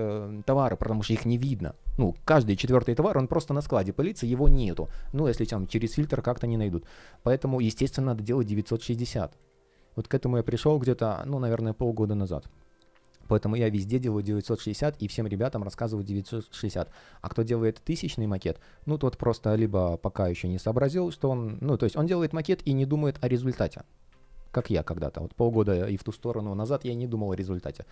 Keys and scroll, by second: 6.7 space, 10.1 super+z, 14.5 space, 21.9 Delete, 24.0 Delete, 25.4 Delete.